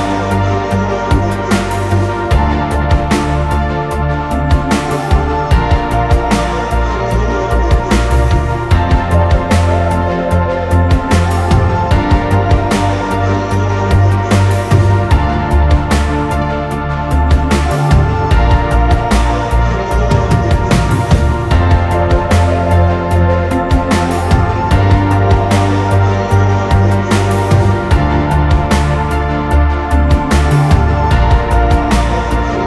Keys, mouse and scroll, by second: 0.0-4.3 typing, 0.4 ctrl+z, 0.8 drag, 3.5 middle click, 3.5-4.0 scroll down 2, 4.8 click, 5.7 m, 6.1-6.6 scroll down 1, 6.8-8.3 typing, 8.0 middle click, 8.2-8.5 scroll down 1, 8.5 click, 10.1 r, 11.6 space, 12.5 click, 12.8-15.2 typing, 15.1 scroll down 2, 15.3 middle click, 15.5-16.1 scroll up 2, 16.1 middle click, 16.3-16.7 scroll down 2, 16.7 t, 16.7 middle click, 18.8 Escape, 19.1 r, 20.8-22.9 typing, 24.4 p, 26.0 space, 27.5 m, 30.0-32.6 typing, 30.3-31.3 scroll down 2, 31.8-32.3 scroll down 2.